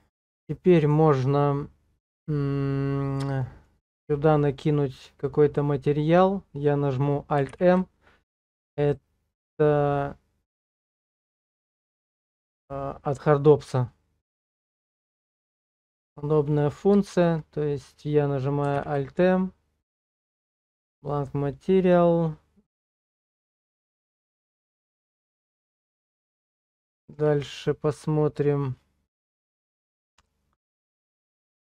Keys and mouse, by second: 0.2 middle click, 3.4 shift+middle click, 4.0 click, 7.5 alt+m, 15.7 shift+middle click, 16.3 middle click, 17.1 shift+click, 18.7 alt+m, 26.1 middle click, 27.0 shift+middle click, 29.2 click.